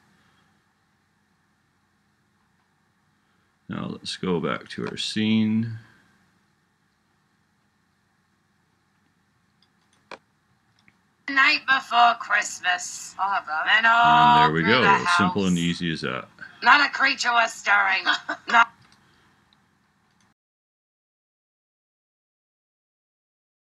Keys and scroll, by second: 10.6 space.